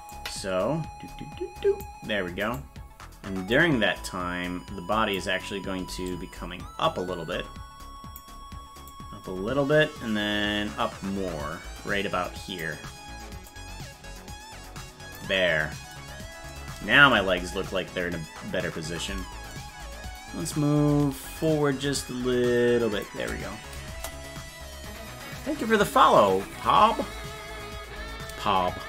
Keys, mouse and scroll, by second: 0.1-1.8 drag, 2.6 right click, 3.5-5.2 drag, 6.1-8.2 drag, 8.9-12.6 drag, 13.5-15.2 drag, 17.2 KP_0, 21.4-23.0 shift+drag, 23.9 KP_0.